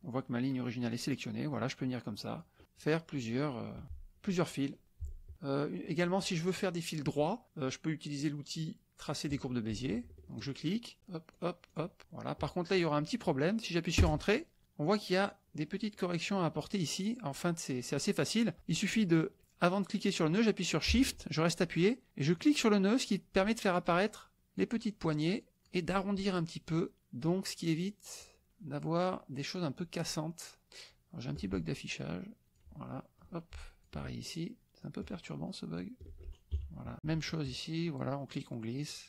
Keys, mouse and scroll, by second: 1.5-2.6 shift+drag, 2.7-3.5 shift+drag, 3.8 click, 4.2 shift+click, 5.4 shift+click, 9.3 click, 10.3 shift+click, 10.9 shift+click, 11.3 shift+click, 11.7 shift+click, 12.0 shift+click, 12.7 shift+click, 14.0 Return, 15.8 click, 17.8 click, 22.3-24.3 shift+drag, 24.5-25.8 shift+drag, 27.0 shift+click, 28.2 shift+click, 30.0-31.5 shift+drag, 32.4 click, 32.9 click, 33.6 shift+click, 34.9-36.0 shift+drag, 36.5 KP_Subtract, 36.9 click, 37.7 shift+click, 38.9 shift+click.